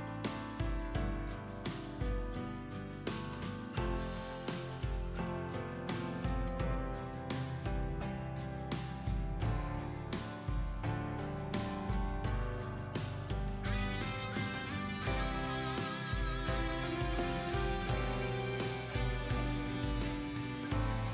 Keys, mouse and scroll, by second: 2.8 click, 4.7 scroll up 1, 5.2-6.3 drag, 7.2 scroll down 1, 7.7-21.1 drag.